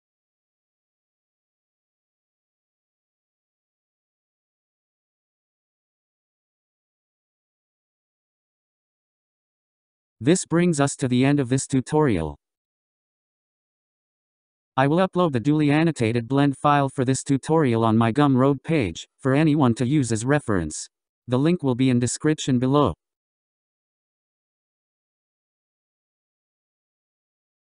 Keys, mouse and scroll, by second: 2.7-3.8 scroll down 1, 3.8-6.8 middle drag, 11.4 click, 15.4 scroll up 1, 18.4-21.4 drag, 22.5-23.9 scroll down 1, 23.9-27.0 middle drag.